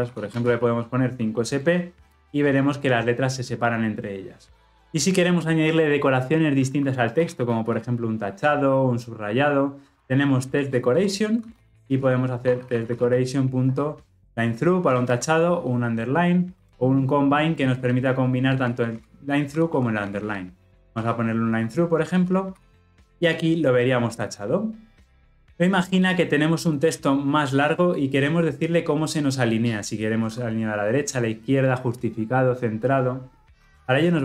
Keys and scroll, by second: 10.9 Return, 21.0 Return.